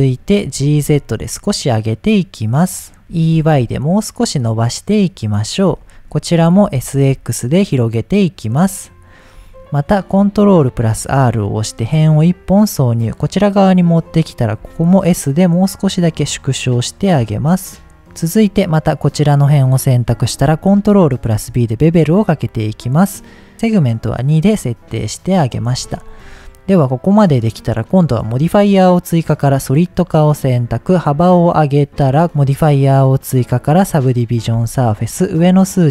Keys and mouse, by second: 0.5 g, 0.7 z, 2.7 click, 3.1 e, 3.4 y, 5.3 click, 5.8 shift+click, 6.6 s, 7.0 x, 8.4 click, 10.8 ctrl+r, 13.6 click, 14.6 s, 17.2 x, 18.4 click, 20.3 ctrl+b, 23.5 middle click, 24.7 middle click, 25.7 Tab, 29.8 drag, 31.0-32.2 drag, 33.8 click, 35.6 click.